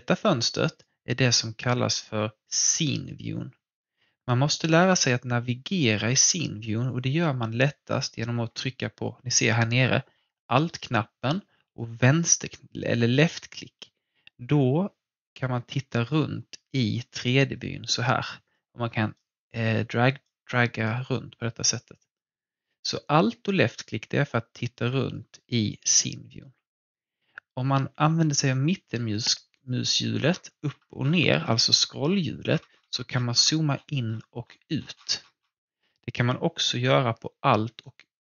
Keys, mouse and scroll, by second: 6.2 alt+Num_Lock, 6.9-9.7 alt+drag, 11.7-25.1 alt+drag, 27.9 scroll down 1, 30.2-31.3 scroll up 1, 31.3-32.5 scroll down 1, 32.5-33.3 scroll up 1, 33.7-34.9 scroll down 1, 34.9 scroll up 1, 37.8-38.2 alt+right drag.